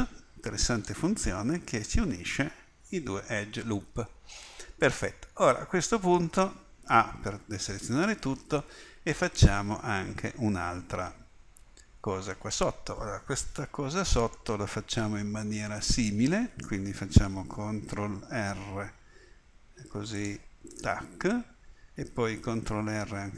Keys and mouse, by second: 7.0 a, 18.4 ctrl+r, 23.0 ctrl+r.